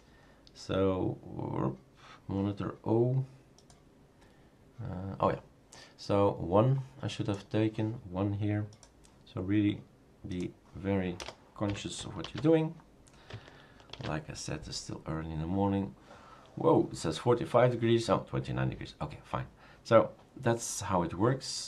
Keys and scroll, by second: 11.2 BackSpace, 11.6 1, 12.2 ctrl+s, 14.0 shift+super+r.